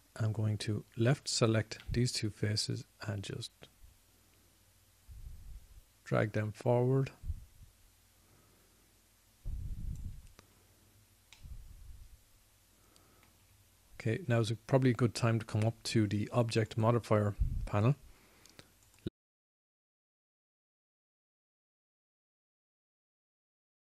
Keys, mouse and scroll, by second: 1.6-6.2 drag, 12.5 middle click, 16.6-17.8 middle drag, 20.3 click, 20.7 click.